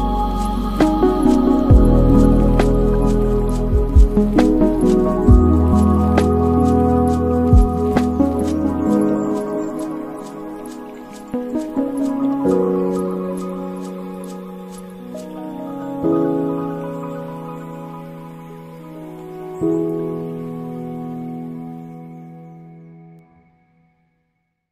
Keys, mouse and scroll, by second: 2.4 space, 3.3 space, 3.7-6.6 drag, 6.6 space, 10.6 space, 11.8-12.3 scroll down 10, 12.5-13.9 middle drag, 13.9 click, 14.6 shift+a, 17.3-18.6 middle drag, 18.6-20.1 drag, 20.1-21.3 right drag, 21.3-22.0 middle drag, 22.0 click, 22.8 shift+a.